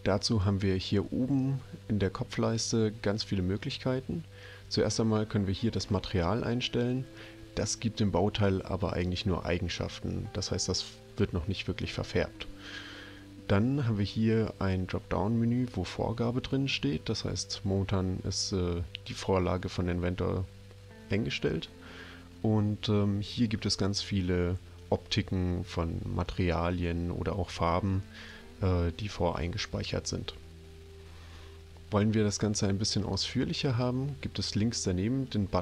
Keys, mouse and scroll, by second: 15.6 click, 33.1 click.